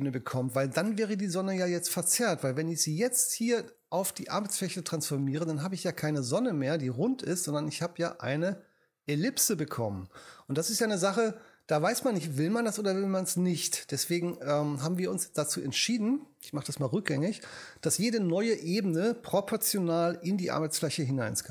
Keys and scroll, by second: 17.2 alt+super+z.